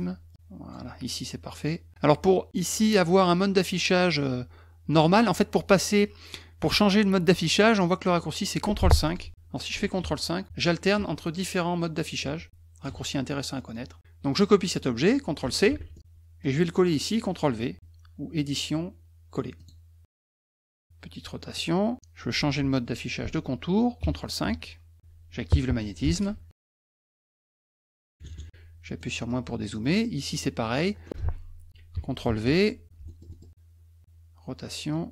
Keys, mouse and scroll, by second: 0.3 click, 9.0 click, 13.7 middle click, 15.7 ctrl+c, 15.9 middle click, 18.4 click, 19.6 click, 21.5 click, 26.1 shift+ù, 26.8 click, 29.0 middle click, 29.7 middle click, 29.9 middle click, 30.3 middle click, 30.8 middle click, 32.2 ctrl+v, 33.1 middle click, 33.3 middle click, 34.9 click.